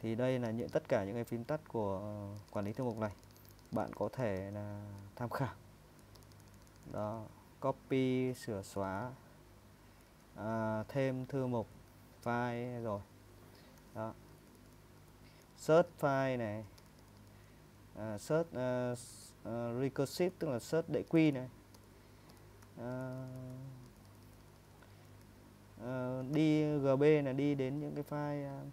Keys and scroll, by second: 1.8-5.7 typing, 6.9 typing, 16.1-26.6 typing.